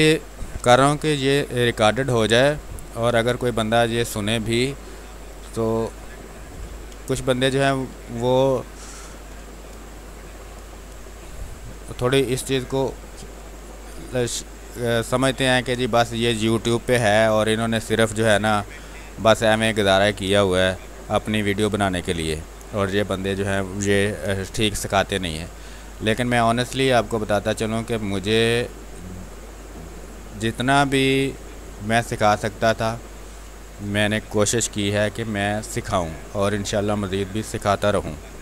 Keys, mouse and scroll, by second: 0.8 ctrl+d, 1.0 w, 1.8 click, 2.1 space, 4.0 ctrl+click, 6.5 n, 6.9 space, 7.1 ctrl+click, 7.8 w, 8.1 click, 9.2 n, 12.0 click, 12.8 ctrl+z, 13.6-16.1 drag, 16.1 ctrl+z, 18.8-20.5 drag, 20.5 w, 20.9 click, 22.1 ctrl+d, 22.5 click, 23.9 b, 24.2 space, 24.3 click, 24.7 space, 25.2-28.1 drag, 31.9 space, 32.2 alt+click, 34.7 ctrl+d, 34.9 w, 35.9 click, 36.2 space, 36.7 ctrl+click, 37.9 w, 38.3 click.